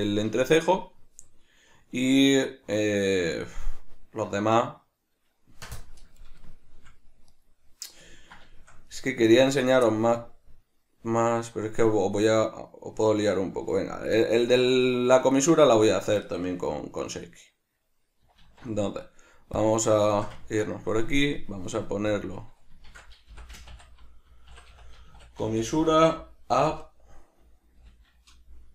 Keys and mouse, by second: 7.3 right click, 8.2-9.5 ctrl+middle drag, 9.5 right click, 9.9-11.2 shift+middle drag, 11.2 right click, 12.2 right click, 14.1 right click, 14.7 right click, 15.4 right click, 17.0-18.4 right drag, 18.4 alt+q, 20.2-21.4 ctrl+shift+middle drag, 21.4 click, 22.2-28.7 drag.